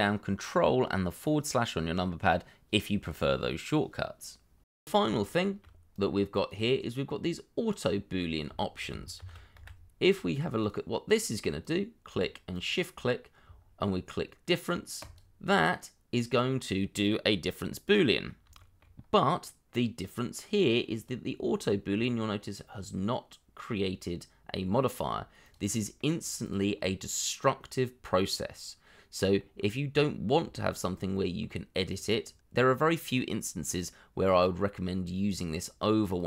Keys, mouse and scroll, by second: 5.2 shift+middle click, 8.2 scroll down 1, 8.5 shift+middle click, 9.2 shift+d, 9.5 x, 11.1-12.1 scroll up 1, 12.5 shift+click, 17.5 middle click, 18.6 shift+middle click, 18.9-21.0 scroll up 1, 25.0 scroll down 1, 25.8 middle click, 29.5-30.1 scroll up 1, 30.2 scroll down 1, 30.5 shift+middle click, 31.1 middle click.